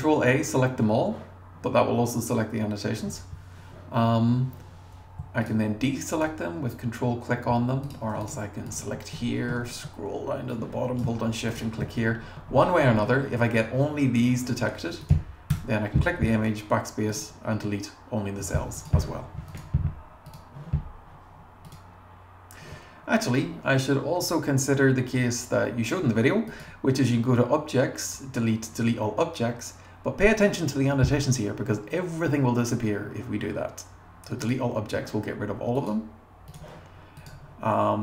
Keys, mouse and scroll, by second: 5.4 super+click, 6.1 super+click, 7.8 click, 8.2 click, 8.7 click, 9.0 scroll down 1, 9.2-9.6 scroll up 2, 10.5 click, 12.0-12.9 scroll down 6, 15.0 click, 15.5 BackSpace, 17.1 click, 18.8 click, 21.7 click, 25.3-25.6 scroll up 2, 35.8 click, 35.9 Right, 36.5 click.